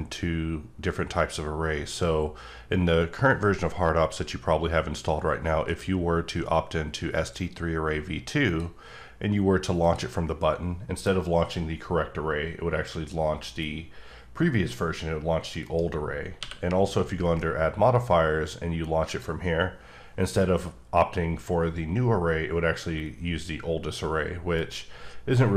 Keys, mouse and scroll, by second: 8.5 click, 9.8 click, 12.1-14.2 scroll up 3, 15.6 right click, 16.4 q, 19.0 q, 19.2 click, 21.0-23.2 scroll up 1, 23.2 scroll up 2, 24.5 right click.